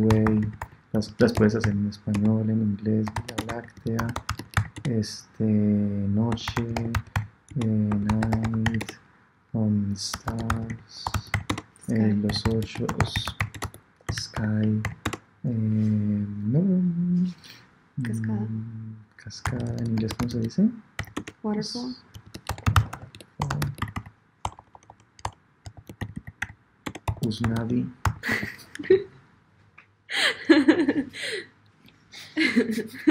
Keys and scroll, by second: 11.0 BackSpace, 23.3 BackSpace, 25.9 BackSpace.